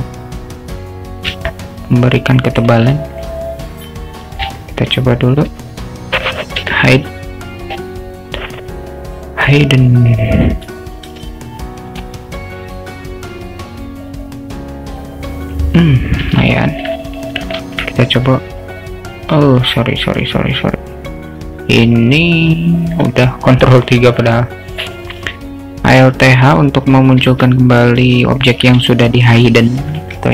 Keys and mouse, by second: 1.7 alt+shift+middle click, 3.0 alt+middle click, 4.3 click, 4.7 alt+middle drag, 6.7 h, 7.7 click, 10.4-12.3 drag, 12.7-15.6 drag, 16.7 alt+middle click, 17.7 ctrl+3, 23.2-23.9 alt+middle drag, 25.0 middle click, 27.3 alt+h, 28.4 click, 29.0-29.4 alt+shift+middle drag, 29.9 ctrl+s.